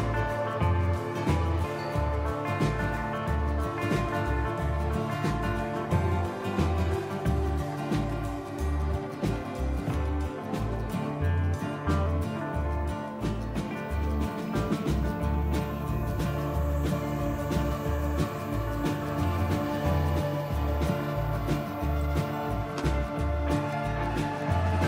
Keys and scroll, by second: 7.6 typing, 9.7-10.4 typing, 15.7-17.5 typing.